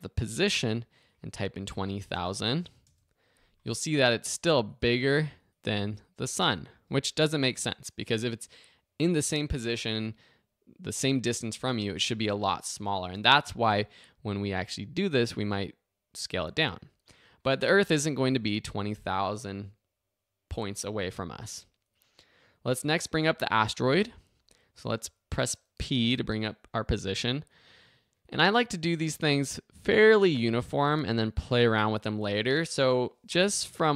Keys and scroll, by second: 0.2 p, 1.4-2.3 typing, 2.9 Return, 18.2 0, 18.4 Return, 26.0 p.